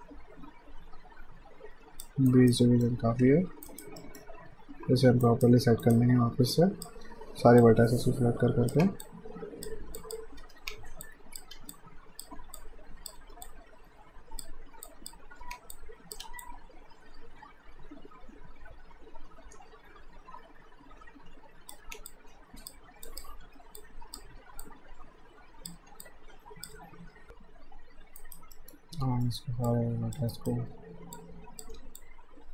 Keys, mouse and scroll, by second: 2.3 alt+right click, 2.6 alt+middle click, 3.2 q, 3.6 alt+right click, 4.0 alt+middle click, 5.3 alt+right click, 6.5 click, 7.0 w, 7.6 click, 8.7 r, 9.0 click, 10.4 w, 11.0 click, 11.5 w, 11.7 click, 12.3 r, 12.6 click, 13.2 w, 13.5 click, 15.4 r, 15.7 click, 16.2 w, 16.5 click, 21.8 r, 22.1 click, 23.4 r, 23.8 click, 24.4 w, 24.6 click, 25.8 r, 26.1 click, 27.2 F5, 28.2 alt+right click, 28.6 alt+middle click, 29.7 click, 30.3 right click, 31.2 click, 31.8 w, 32.0 click.